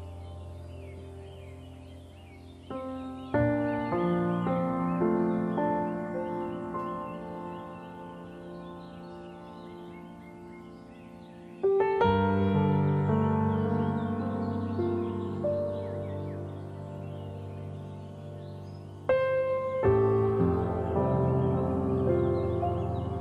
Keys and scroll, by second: 6.9 ctrl+0, 9.1 F9.